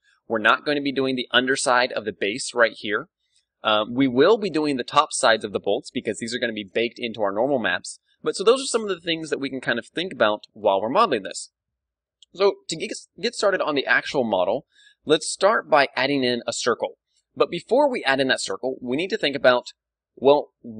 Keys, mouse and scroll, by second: 9.9-15.1 middle drag, 16.5-19.6 middle drag.